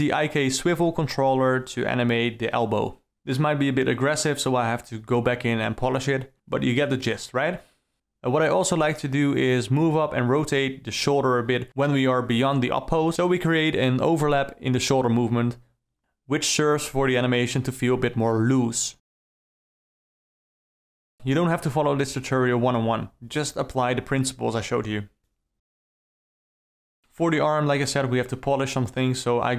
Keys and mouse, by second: 1.5 space, 1.5 d, 2.6 Right, 2.8 Down, 3.3-4.0 Right, 5.3 space, 5.4 d, 6.4 Right, 6.7 Down, 7.1-7.8 Right, 7.9 middle drag, 8.1 click, 8.6 r, 10.1 i, 10.9 Up, 11.3 r, 11.7 Down, 12.4 ctrl+click, 12.8 Up, 13.3 ctrl+click, 13.9 i, 14.2 click, 14.9 ctrl+click, 15.2 i, 15.5 Right, 15.7 Up, 16.8 click, 17.4 shift+d, 18.2 s, 19.1 KP_Decimal, 20.3 KP_0, 21.1 shift+Left, 21.4 space, 27.0 Up, 27.1-27.6 alt+middle drag, 27.6 shift+e, 28.1 alt+middle click, 28.3 middle click, 28.8-29.5 typing.